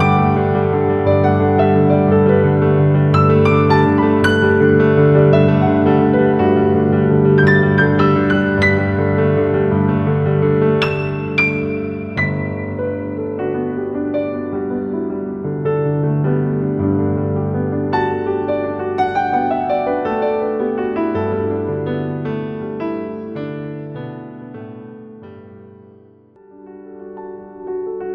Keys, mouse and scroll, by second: 4.3-18.5 drag, 18.5-20.7 typing, 18.7 click, 19.1 click, 19.3 click, 19.7 click, 21.3 click, 22.0 click, 23.1-24.5 alt+drag, 24.7 click, 24.9 z, 24.9 space, 25.0 click, 25.1 z, 25.3 click, 26.7-28.1 alt+drag.